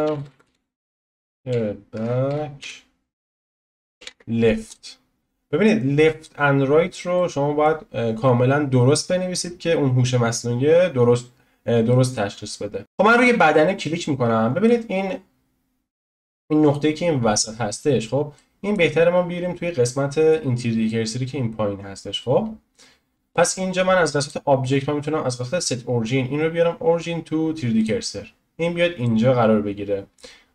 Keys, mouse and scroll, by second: 0.3 e, 6.1 click, 7.1-10.1 middle drag, 10.1 scroll down 1, 10.6 scroll up 1, 11.9-12.5 middle drag, 12.5-12.8 scroll down 2, 12.8 middle click, 13.0-13.5 drag, 13.5-15.3 middle drag, 15.3-16.1 scroll up 1, 16.1-17.9 shift+middle drag, 17.9-18.3 scroll down 1, 18.3-24.2 middle drag, 24.2-27.9 drag, 29.0-30.5 middle drag.